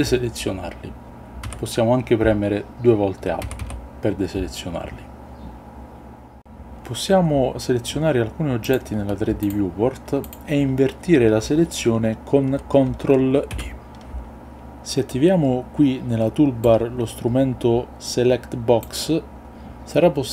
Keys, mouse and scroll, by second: 1.5 a, 3.3 a, 3.7 a, 13.6 ctrl+i, 16.6-18.7 drag.